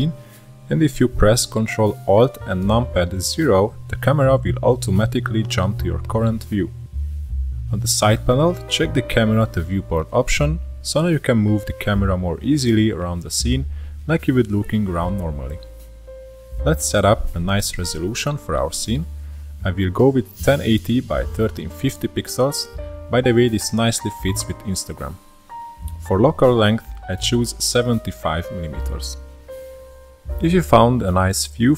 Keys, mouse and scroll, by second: 1.9-2.2 scroll down 1, 2.2-5.2 shift+middle drag, 5.2 ctrl+alt+KP_0, 7.3 middle click, 8.2-8.7 scroll up 1, 8.7-9.4 middle drag, 9.4 n, 11.8 click, 13.3 click, 15.0-16.5 middle drag, 16.8 click, 18.1-21.2 drag, 21.2-24.3 drag, 24.3-25.0 scroll down 1, 25.0-26.8 scroll up 1, 26.8 click, 28.2-31.2 drag.